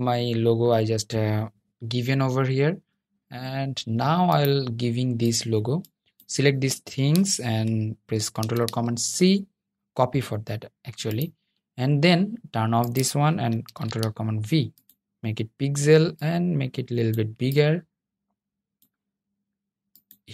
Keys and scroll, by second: 7.5 super+c, 12.7 super+v, 20.1 super+s.